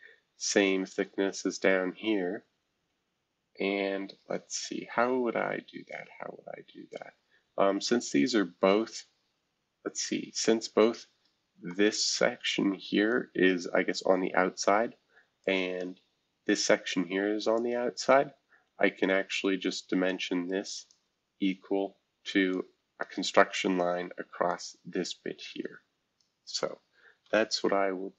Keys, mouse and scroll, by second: 0.6-1.2 scroll up 2, 1.2-1.8 scroll up 1, 1.8-2.7 scroll up 1, 3.4-4.5 scroll down 3, 7.3-8.8 scroll up 2, 9.8 F2, 11.7 click, 13.1-14.6 drag, 15.4 click, 16.5 click, 17.5 click, 20.1 click, 22.5 click, 24.5-26.2 shift+drag, 27.0 shift+F2.